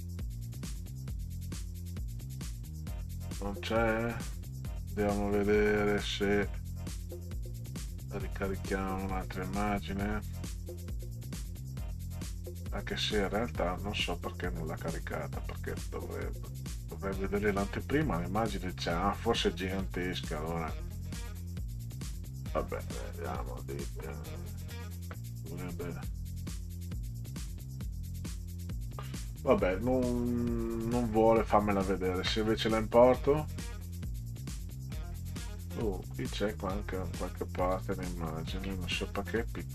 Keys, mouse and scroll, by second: 7.8 click, 9.6 click, 10.1 click, 10.5 click, 11.0 click, 13.3-15.0 drag, 15.9 click, 22.0 click, 24.4 click, 25.8 click, 27.6 click, 30.2-31.5 drag, 35.2 click, 36.5 click, 37.9 ctrl+scroll down 2, 39.3 middle click.